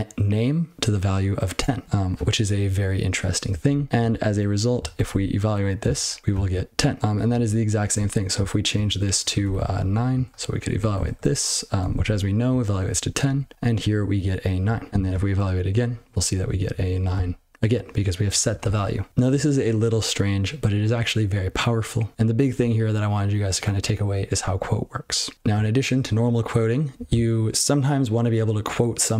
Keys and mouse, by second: 3.5-3.9 ctrl+n, 4.1 ctrl+n, 4.9 ctrl+e, 6.0 ctrl+c, 7.0 ctrl+/, 7.2 ctrl+/, 7.4-7.9 ctrl+p, 7.9 ctrl+f, 8.1 ctrl+f, 8.3-8.7 ctrl+n, 9.0 ctrl+p, 9.4 ctrl+BackSpace, 9.8 9, 10.2 ctrl+p, 10.4 ctrl+p, 10.7 ctrl+e, 11.9 ctrl+c, 12.5-12.8 ctrl+n, 13.2 ctrl+p, 13.5 ctrl+c, 13.7-14.1 ctrl+n, 14.6 ctrl+n, 14.8 ctrl+n, 14.8 ctrl+n, 14.9 ctrl+c, 16.1 ctrl+p, 16.4 ctrl+n, 16.6 ctrl+n, 21.0 ctrl+n, 25.3 ctrl+p.